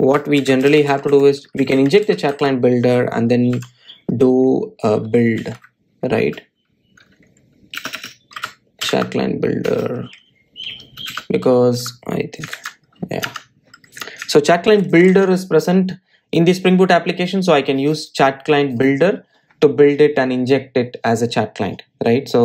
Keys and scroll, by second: 13.6 super+z, 14.3 Tab, 17.2 super+s, 20.0 super+r.